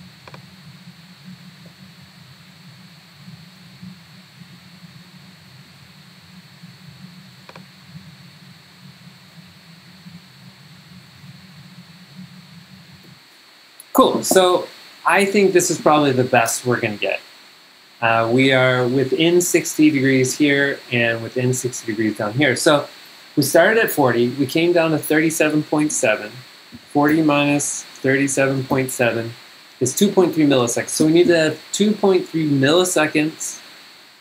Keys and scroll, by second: 1.7 7, 3.6-6.0 typing, 9.0-10.8 typing, 11.2 Return, 13.1 g, 26.7-29.3 typing, 31.1 Escape, 32.8 super+Tab.